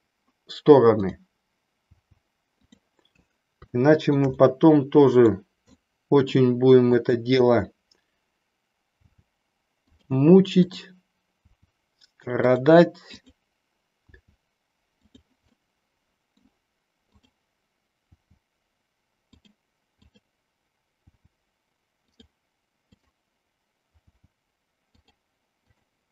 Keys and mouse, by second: 1.0 click, 1.9 g, 2.6 click, 3.8 shift+middle click, 4.4-5.4 middle drag, 5.8 middle click, 6.9 click, 9.0 g, 10.6 click, 11.4 g, 13.1 click, 15.1 click, 15.6 middle click, 17.1 click, 18.1 g, 20.0 click, 21.1 g, 22.3 click, 22.9 click, 25.6 click.